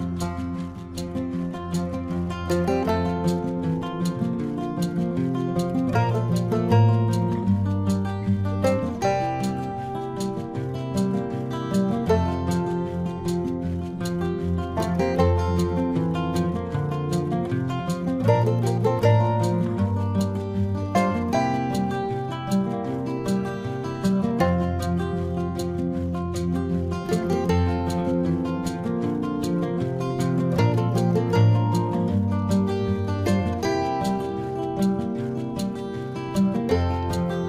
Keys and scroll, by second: 0.3 space, 3.0 space, 3.5 space, 4.7 space, 5.0 space, 7.3 space, 7.9 ctrl+alt+z, 8.4 space, 10.5 space, 14.3 ctrl+=, 14.8 ctrl+=, 15.0 ctrl+-, 17.6 space.